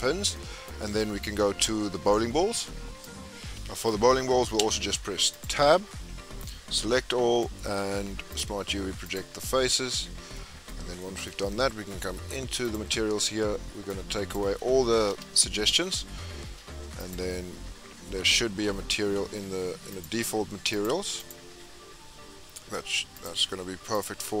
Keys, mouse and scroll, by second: 0.2 scroll down 6, 0.3-0.8 middle drag, 0.8-1.3 scroll down 4, 1.3-1.8 scroll up 9, 3.3 KP_Decimal, 5.4 click, 5.6 Tab, 6.8 a, 9.2 right click, 9.8 Tab, 10.2 scroll down 1, 10.3-12.8 middle drag, 12.8-16.9 drag, 20.7-23.9 drag.